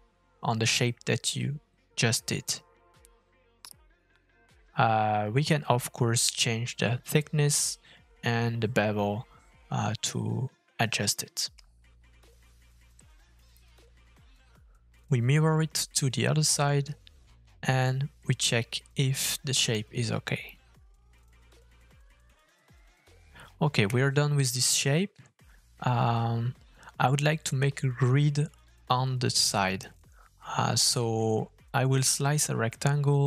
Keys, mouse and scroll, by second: 3.7 middle click, 5.0 shift+middle click, 5.4-5.7 scroll up 2, 11.8-12.9 scroll down 2, 12.0 middle click, 14.0 middle click, 15.3 middle click, 17.5 middle click, 18.7 middle click, 19.5 middle click, 20.3 middle click, 22.1 middle click, 23.6 shift+middle click, 24.2-24.7 scroll down 1, 24.7 middle click, 25.2 shift+click, 25.8 shift+middle click, 26.9 f, 32.2 f.